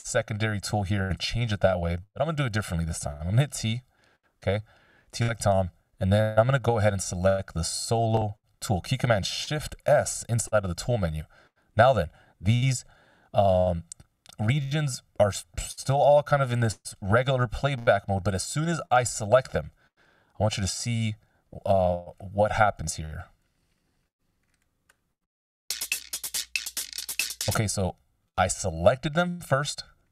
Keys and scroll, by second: 4.2 t, 10.4 shift+s.